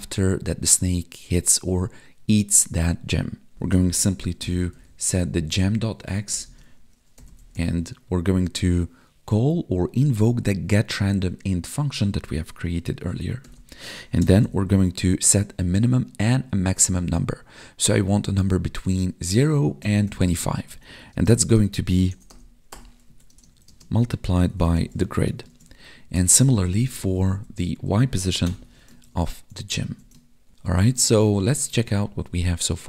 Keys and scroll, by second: 6.1 space, 6.4 space, 8.6 Tab, 21.1 space, 21.4 space, 23.0 Right, 23.3 space, 23.6 space, 25.5 ctrl+s, 26.0 alt+shift+Down, 26.4 ctrl+Left, 27.8 Left, 29.0 ctrl+s, 30.4 ctrl+Down, 31.4 Tab.